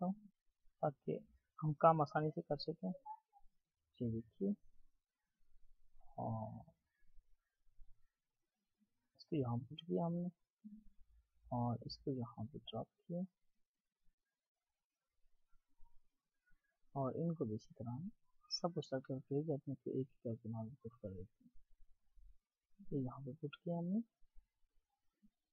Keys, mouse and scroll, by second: 24.1-25.5 alt+scroll up 1.